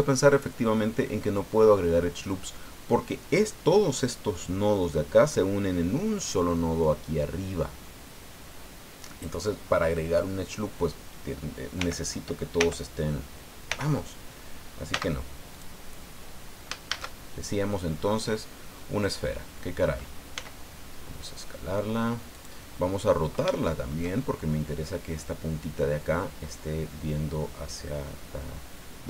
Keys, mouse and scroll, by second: 0.6 scroll up 2, 11.8 l, 12.6 l, 13.7 l, 14.9 x, 15.5 click, 15.9 scroll down 1, 16.9 shift+a, 19.0 click, 19.4-19.8 scroll down 2, 20.3 s, 22.3 click, 23.1-23.4 scroll up 2, 23.5 shift+middle click.